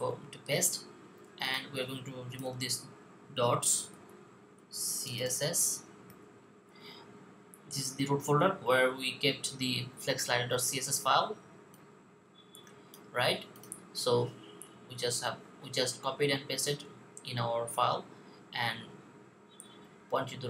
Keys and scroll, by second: 3.2-5.9 typing.